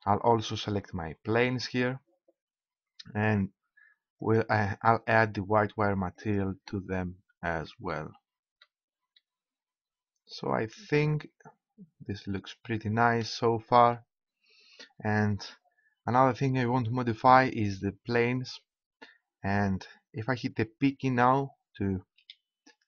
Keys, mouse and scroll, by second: 1.3-3.1 right drag, 4.9-5.9 middle drag, 5.9-6.6 scroll up 1, 18.0-20.9 right drag, 22.0 p.